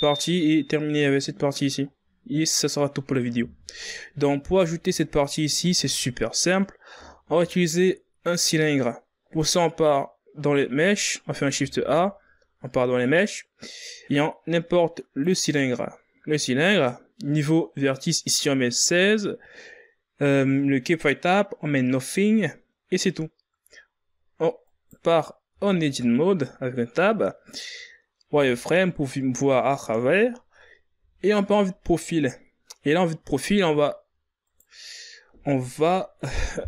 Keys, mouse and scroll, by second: 2.6-3.3 scroll down 5, 4.1 z, 5.1 z, 7.9 shift+a, 12.5 shift+a, 25.4 right click, 26.3 Tab, 29.1 z, 31.7 KP_3, 34.1 scroll down 5, 35.2 right click.